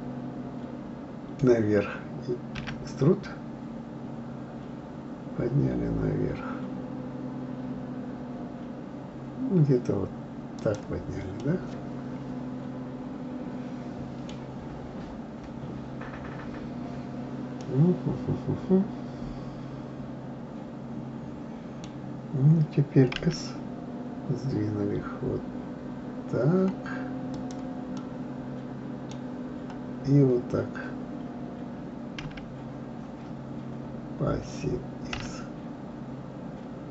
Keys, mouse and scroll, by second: 11.4-14.4 middle drag, 17.6-20.6 middle drag, 28.0-31.0 middle drag.